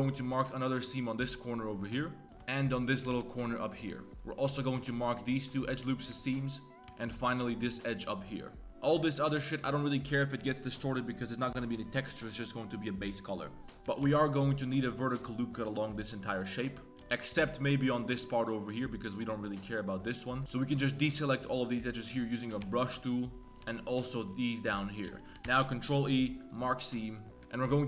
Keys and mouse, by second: 0.6 alt+click, 1.3 ctrl+e, 2.8 alt+click, 3.1 ctrl+e, 4.1 click, 4.1 a, 4.4 alt+click, 5.2 alt+shift+click, 6.2 shift+click, 6.7 ctrl+z, 7.0 alt+click, 7.3 ctrl+e, 8.5 middle click, 13.6 click, 13.6 3, 13.8 2, 14.2 alt+click, 14.8 click, 16.3 click, 17.1 z, 17.3 c, 20.3 click, 20.4 z, 20.4 c, 22.1 middle click, 22.6 c, 23.4 z, 23.6 c, 25.0 z, 25.1 click, 25.4 ctrl+e, 26.9 drag.